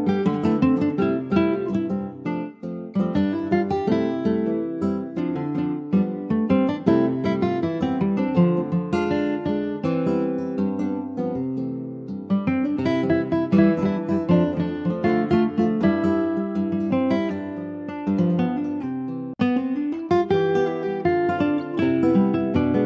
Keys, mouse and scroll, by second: 0.5-0.9 scroll down 2, 0.9 Tab, 1.1 click, 1.7 middle click, 2.3 ctrl+s, 2.4 ctrl+scroll down 4, 2.6 middle click, 3.3 ctrl+s, 3.8 middle click, 4.1 scroll down 2, 4.5 shift+middle click, 5.2 ctrl+s, 5.3 scroll down 1, 5.6 middle click, 6.1 click, 6.5 middle click, 7.1 ctrl+s, 7.3 middle click, 7.5 scroll up 2, 7.8 shift+middle click, 8.4 click, 8.7 shift+middle click, 9.0 shift+scroll up 1, 9.2 middle click, 9.7-10.1 scroll up 1, 10.5 /, 10.9 middle click, 11.4 Tab, 11.8 middle click, 12.0 scroll up 1, 12.1 click, 12.5 Tab, 12.8 middle click, 13.3 click, 14.1 middle click, 14.6 click, 15.0-16.0 middle drag, 16.0 click, 16.7 Tab, 18.1 middle click, 18.8 ctrl+f, 20.7 ctrl+z.